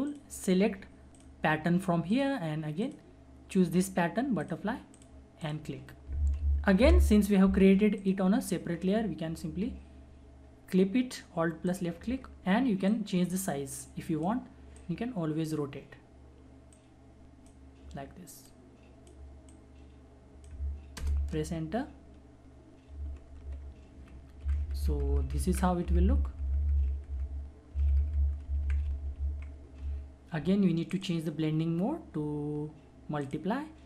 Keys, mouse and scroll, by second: 0.1 alt+click, 6.8 ctrl+alt+d, 7.9 alt+click, 11.7-21.0 alt+drag, 21.0 Return, 23.0 ctrl+=, 24.4 Right, 28.4 Up, 30.9 click, 33.2 click.